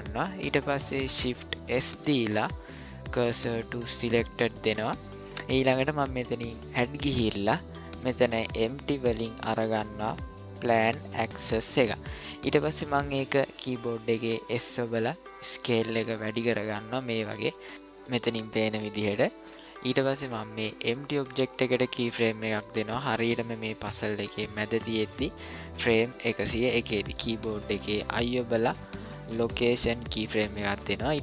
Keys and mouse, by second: 1.6 shift+s, 6.8-11.5 drag, 14.1 s, 27.7 i.